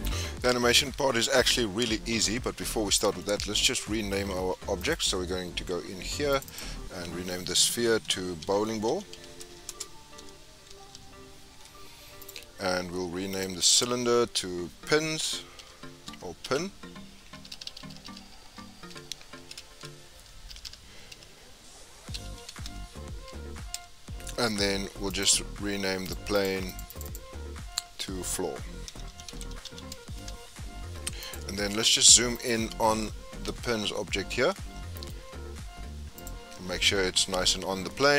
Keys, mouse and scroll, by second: 3.1 scroll down 1, 3.2-4.7 middle drag, 4.7 click, 6.3-9.6 drag, 10.9 l, 13.3 click, 13.6-16.7 drag, 17.5-18.5 typing, 19.5 Right, 19.7 Right, 20.6 BackSpace, 25.1 click, 26.0 click, 26.7 click, 26.9 click, 27.0-29.4 drag, 29.4 o, 31.2 click, 32.3 click, 33.4 KP_Decimal, 34.2 scroll down 8, 34.5-35.1 middle drag, 35.1-36.1 scroll up 1, 36.1 click, 36.6-37.5 scroll up 2, 37.5 scroll up 4, 37.7 scroll down 2, 37.9-38.1 middle drag.